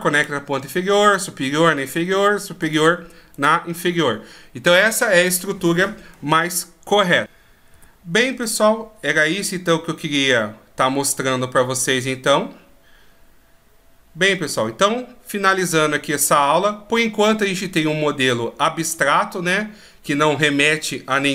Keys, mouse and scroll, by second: 2.1 right click, 2.8 right click, 8.2-9.1 scroll down 1, 9.1-11.5 scroll up 1.